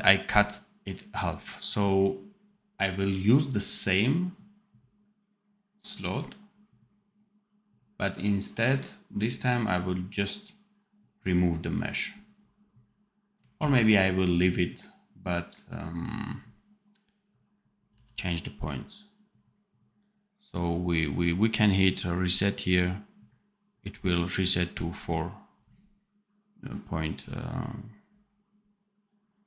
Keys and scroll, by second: 13.5 ctrl+z, 17.8 v.